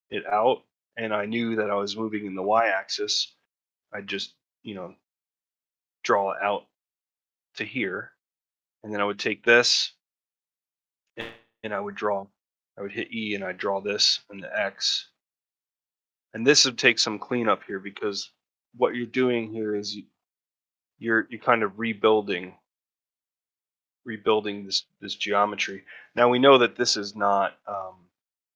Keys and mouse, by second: 16.6 Tab, 17.1 Tab, 18.8 3, 19.2 click, 19.7 middle click, 20.9 middle click, 23.3 middle click, 24.6 middle click.